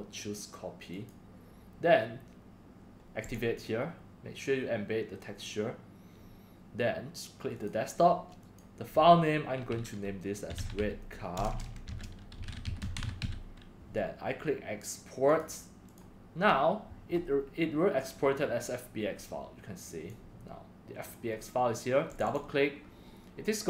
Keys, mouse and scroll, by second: 0.9 click, 1.3 scroll down 1, 3.2 click, 3.6 scroll down 1, 6.1 drag, 7.5 click, 8.4 click, 10.2-13.7 typing, 15.3 click, 15.9 click, 19.8 drag, 21.0 click, 22.1 click, 22.2 click.